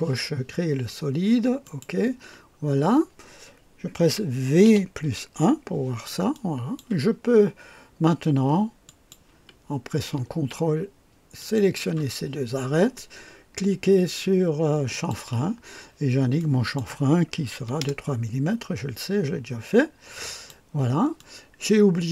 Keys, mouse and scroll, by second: 1.7 click, 2.6-2.9 scroll down 1, 4.6 v, 5.0 KP_1, 6.3-7.0 drag, 7.8-8.6 typing, 8.8 click, 11.4 ctrl+click, 14.9 click, 16.4 click, 17.6 KP_3, 17.8 KP_Enter, 20.2 click, 21.2-22.1 drag.